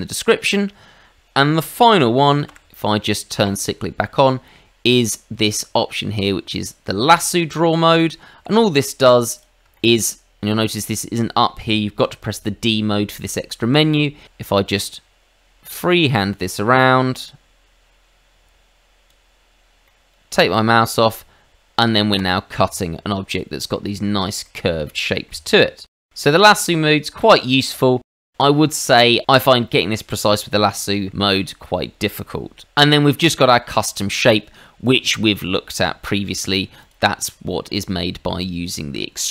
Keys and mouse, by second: 2.4 d, 3.4 click, 7.1 click, 8.3 Escape, 9.3 click, 9.7 shift+middle click, 12.0 d, 13.6 Escape, 14.7 click, 19.8 middle click, 22.1 click, 23.2 middle click, 23.9 shift+middle click, 24.4 middle click, 26.8 middle click, 30.8 shift+middle click, 36.4 click, 36.8 click.